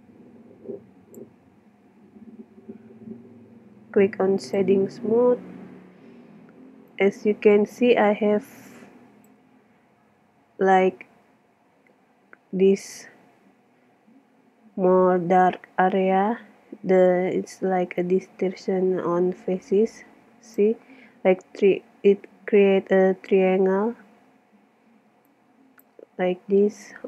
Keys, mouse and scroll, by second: 4.4-6.3 drag, 6.3 middle click, 6.9 click, 7.5 click, 7.6-8.9 middle drag, 10.3-12.2 middle drag, 12.5-14.9 middle drag, 18.0 middle click, 18.2 click, 18.4 click, 18.5 middle click, 18.6-19.7 drag, 25.3 middle click, 26.2 click, 26.8-27.0 middle drag.